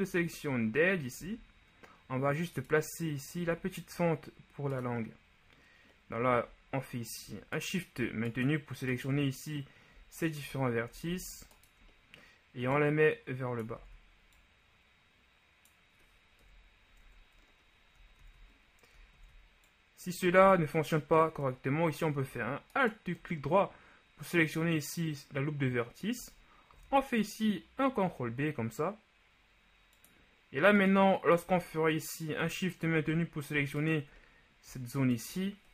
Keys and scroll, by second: 1.3 z, 11.2 ctrl+shift+z, 13.9 ctrl+z, 16.6 KP_1, 17.2 Tab, 18.4 ctrl+z, 19.3 ctrl+z, 20.5 ctrl+z, 26.9 ctrl+b.